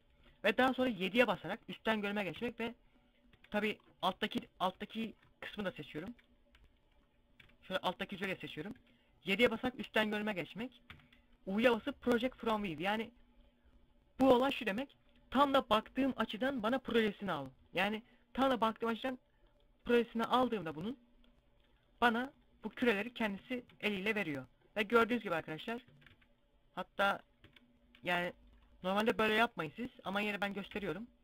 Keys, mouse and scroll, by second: 0.3 KP_7, 1.7 u, 2.7 z, 3.3 middle click, 4.3 middle click, 4.3 scroll up 1, 5.4 z, 5.6 middle click, 6.7 c, 7.6 right click, 8.1 KP_7, 9.0 z, 9.3 scroll up 1, 10.3 u, 20.3 s, 22.0 click, 22.1 g, 22.6 shift+click, 22.9 a, 23.1 a, 25.4 a, 25.5 c, 26.5 right click, 26.9 z, 28.0 right click, 28.6 g, 29.9 shift+right click, 30.3 s, 30.8 right click.